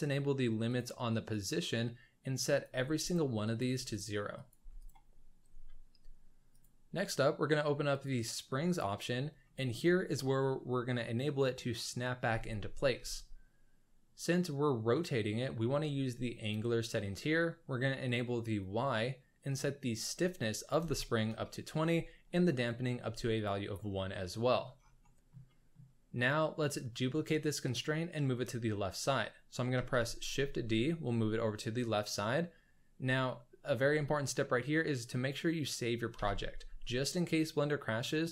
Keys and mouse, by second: 0.7 click, 1.3 click, 2.5 click, 3.5 click, 4.3 click, 6.5 click, 7.9 click, 9.4-9.7 shift+middle drag, 19.4-21.4 drag, 22.6 click, 24.1 middle click, 24.2-24.5 drag, 24.5 middle click, 25.0 shift+middle drag, 25.2 shift+click, 25.3 middle click, 25.4 middle click, 25.5 click, 25.7 middle click, 29.8 shift+d, 36.2 ctrl+s.